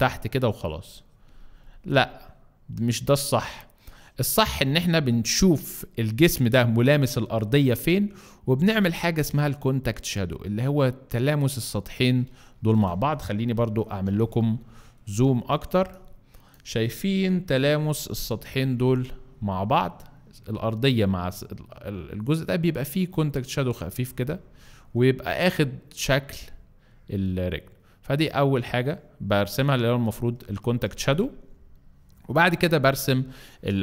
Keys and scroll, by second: 5.7 Escape, 7.7 F3, 12.8 Escape, 13.6 z, 14.4 alt+z, 15.8 alt+space, 17.8 F3, 32.8 space, 33.3 Escape.